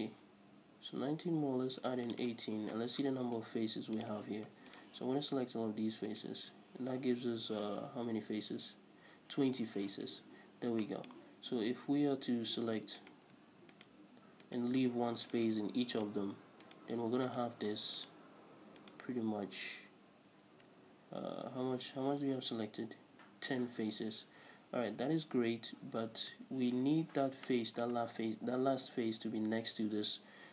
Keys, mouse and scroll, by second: 2.3 click, 2.8 right click, 4.1 click, 4.9 right click, 6.3 ctrl+right click, 10.5-10.9 scroll up 1, 11.0-13.2 shift+middle drag, 13.2 right click, 13.9 shift+right click, 14.6 shift+right click, 15.4 shift+right click, 16.1 shift+right click, 16.8 shift+right click, 17.5 shift+right click, 18.2 shift+right click, 19.0 shift+right click, 19.8 shift+right click, 27.7-30.5 shift+middle drag.